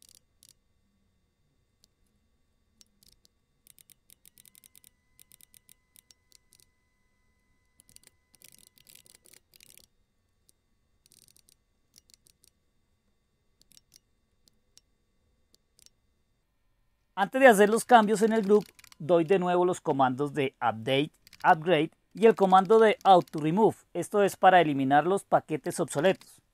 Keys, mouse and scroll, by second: 0.0-0.1 typing, 0.1 Down, 0.4 Down, 0.5 Down, 3.0 Up, 3.0 Up, 3.6 ctrl+k, 3.7 ctrl+k, 4.3 ctrl+k, 4.6 ctrl+k, 4.7 ctrl+k, 5.1 ctrl+k, 5.3 ctrl+k, 5.4 ctrl+k, 5.5 ctrl+k, 5.7 ctrl+k, 5.9 ctrl+k, 6.3 Right, 6.5 Delete, 6.6 Delete, 7.9-12.6 typing, 13.7 ctrl+o, 13.9 Return, 15.8 ctrl+x, 17.4-19.7 typing, 21.0-26.5 typing.